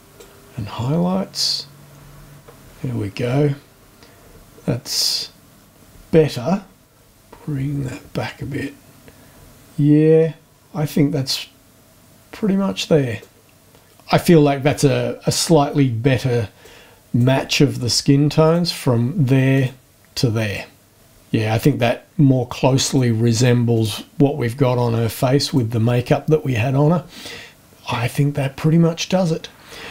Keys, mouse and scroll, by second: 0.2-2.4 drag, 6.3 click, 6.9 Return, 13.2 click, 16.6 click, 18.4 click, 19.5 click, 22.8 click, 23.7 click, 25.4 click.